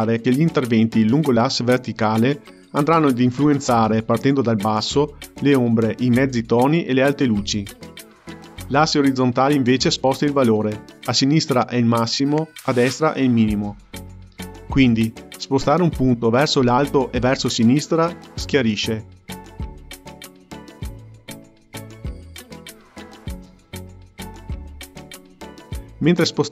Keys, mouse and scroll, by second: 14.2-17.2 drag, 18.5-21.5 drag, 21.9-26.5 drag.